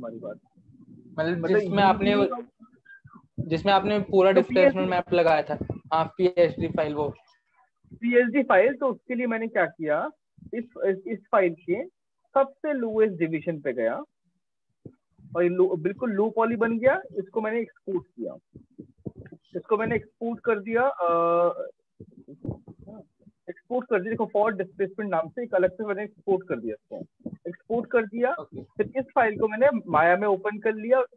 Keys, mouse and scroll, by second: 9.7-10.9 drag, 12.9 click, 17.2 click, 20.6 click, 22.1 click, 22.3 click.